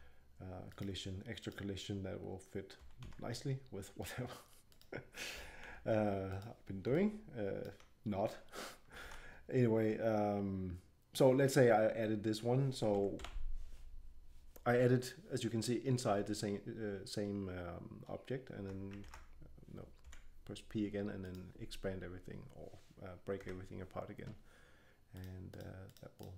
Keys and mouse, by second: 2.8 g, 5.3 g, 9.0 ctrl+l, 12.9 a, 13.2 a, 19.0 ctrl+p, 20.0 p, 23.4 Tab, 25.1-26.3 drag.